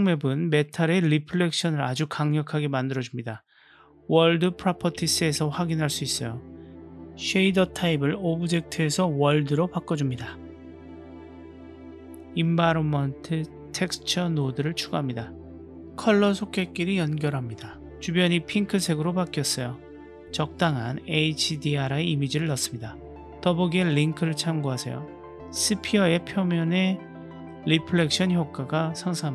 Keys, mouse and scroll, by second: 11.2 shift+a.